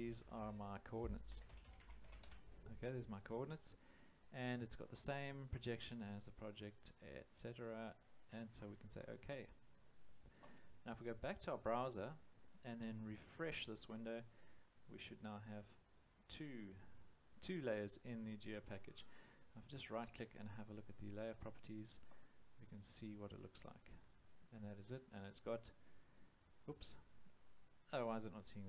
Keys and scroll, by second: 1.0-2.7 typing.